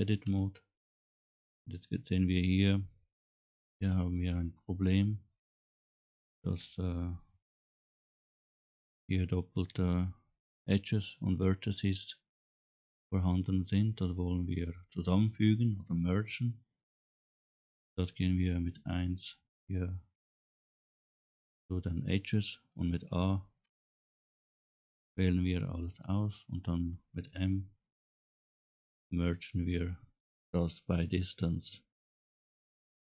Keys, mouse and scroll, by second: 0.2 Tab, 0.8-1.2 scroll up 3, 3.5 click, 5.0 click, 6.5 KP_Decimal, 7.3 scroll down 2, 7.5-8.1 scroll down 3, 8.1 scroll up 1, 9.2 scroll up 1, 13.0 scroll down 1, 13.4 scroll up 2, 20.4 1, 23.6 a, 24.6 scroll down 2, 28.0 m.